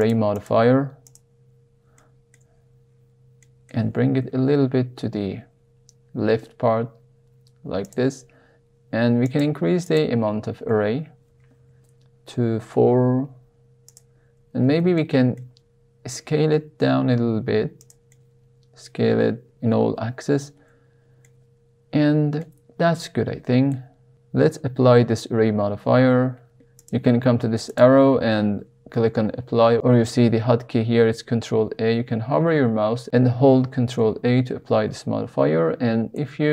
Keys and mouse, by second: 1.1 drag, 2.0 shift+middle click, 3.3 middle click, 4.2 g, 4.4 y, 4.8 x, 7.8 click, 9.3 click, 9.8 click, 11.2 g, 11.5 y, 12.8 x, 13.8 click, 14.5 Tab, 14.9-15.3 shift+middle drag, 16.2 s, 17.7 click, 18.1 middle click, 20.2 Tab, 21.2-22.4 middle drag, 27.8-31.6 drag, 33.9 ctrl+a, 36.1 Tab.